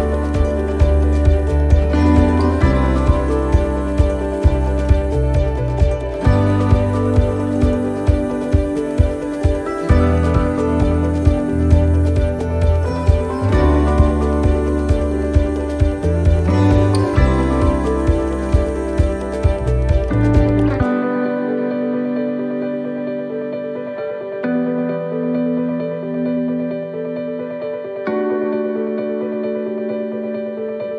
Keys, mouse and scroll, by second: 0.7 middle click, 3.0 middle click, 3.7 scroll up 1, 4.8 click, 5.7 middle click, 7.1 scroll down 1, 7.4 scroll up 2, 7.8 shift+middle click, 8.2-8.5 scroll down 2, 8.5 middle click, 8.9-9.5 scroll up 6, 9.6 middle click, 10.9 shift+middle click, 12.4 click, 13.6 right click, 14.6 l, 16.5 click, 18.4 middle click, 18.8 scroll down 2, 19.2 middle click, 19.7-20.0 scroll down 1, 20.8 a, 23.8 u.